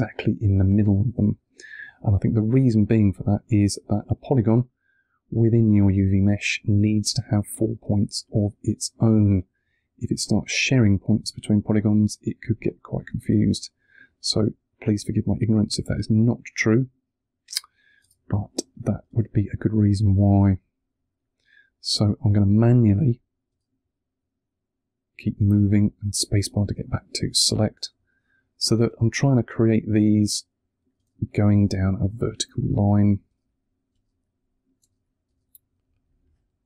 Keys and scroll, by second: 17.9 space, 21.5 1, 22.6 space, 25.2 space, 27.7 1, 28.8 space, 30.8 space, 32.4 1, 33.1 space, 36.0 1.